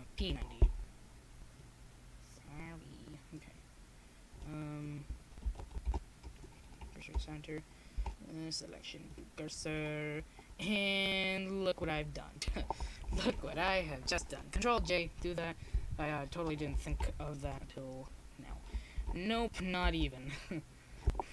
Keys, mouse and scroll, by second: 2.1 ctrl+z, 5.3-7.4 drag, 6.4 r, 10.3-11.5 drag, 12.0 KP_7, 13.8-15.3 middle drag, 15.4 click, 17.3-18.7 drag, 18.7 ctrl+z, 19.1 shift+s.